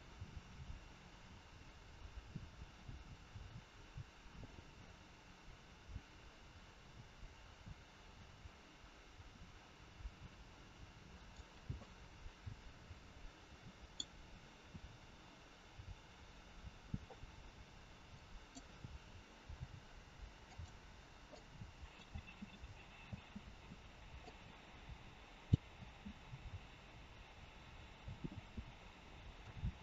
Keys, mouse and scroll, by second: 11.9 scroll down 2, 12.7 middle click, 18.1 click, 19.3 g, 21.3 click, 22.1 space, 23.0 space, 24.3 click, 25.8 space, 27.9 space, 29.4 click.